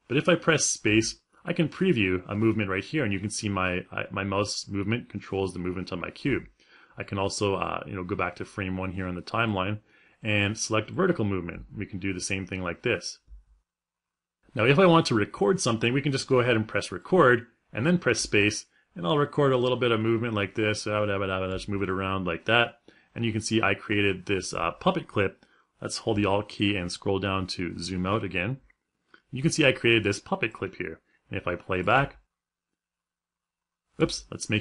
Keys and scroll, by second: 0.5 space, 5.8 space, 11.2 space, 17.8 space.